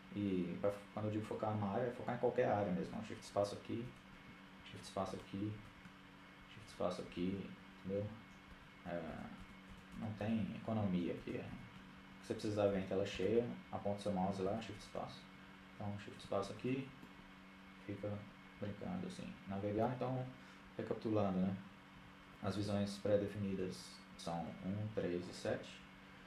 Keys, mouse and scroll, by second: 4.3 shift+space, 6.1 shift+space, 7.7 shift+space, 9.7 shift+space, 10.4 shift+space, 10.9 shift+space, 12.2 shift+space, 13.6 shift+space, 13.8 shift+space, 15.4 shift+space, 17.2 shift+space, 17.9-19.3 middle drag, 23.2-26.2 typing.